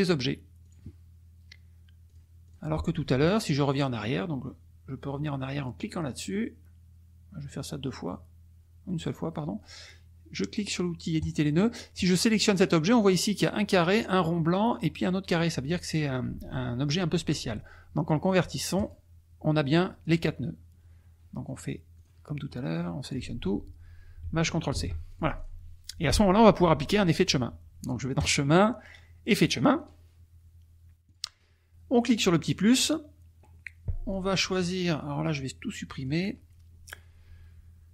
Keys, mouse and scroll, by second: 0.7 click, 2.0 click, 2.4 click, 6.2 click, 7.5 click, 9.0 click, 11.2 click, 12.1 click, 18.7 click, 19.7 click, 21.9 click, 22.5 click, 24.7 ctrl+shift+c, 25.1 ctrl+shift+click, 28.1 click, 29.4 click, 31.0 click, 32.4 click, 34.1-35.8 drag, 36.0 click.